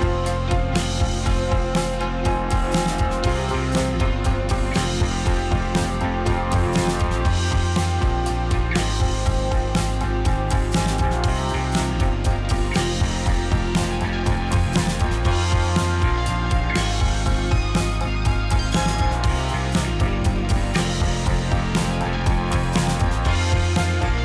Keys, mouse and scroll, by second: 0.0 shift+click, 0.4 shift+middle click, 1.1 shift+drag, 1.3 shift+drag, 1.5 shift+click, 1.6 shift+click, 1.8 shift+click, 2.0 middle click, 2.5 shift+click, 2.7-3.2 middle drag, 3.2 shift+click, 3.4-4.5 middle drag, 4.8 g, 6.9-9.6 middle drag, 9.6 click, 9.8-10.9 middle drag, 11.0 middle click, 11.4 `, 13.2 g, 14.7 g, 15.5 click, 15.6-16.6 middle drag, 16.6 click, 16.9-18.4 middle drag, 18.4-18.8 scroll down 2, 19.2 ctrl+s, 20.2 scroll down 1, 20.4-21.5 middle drag, 23.4-24.2 shift+middle drag.